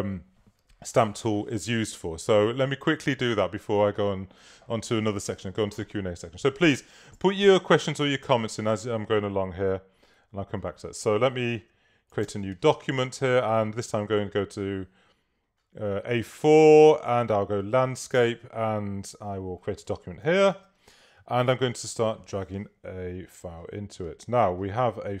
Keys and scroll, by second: 12.3 super+n, 20.6 super+-.